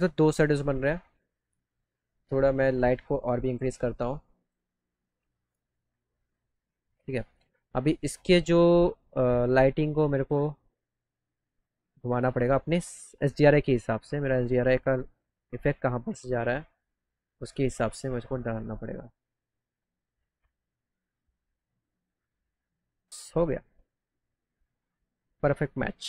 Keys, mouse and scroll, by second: 2.8-4.4 drag, 9.3 click, 9.8 click, 14.2 click, 15.7 right click, 17.5 click, 20.3 click, 20.6 middle click, 20.6 middle click, 20.9-22.2 drag, 22.2 click, 22.8 click, 22.8 right click, 23.2 middle click, 23.6 middle click, 24.3 click, 24.8 click, 25.8 click.